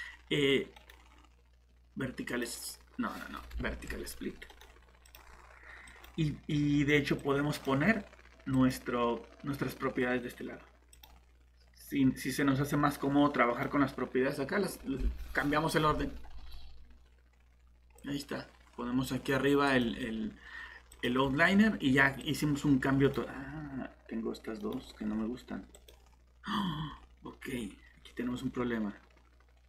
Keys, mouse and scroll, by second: 0.8 right click, 2.3 click, 3.6 Escape, 4.5 right click, 5.0 click, 24.6 right click, 25.7 click.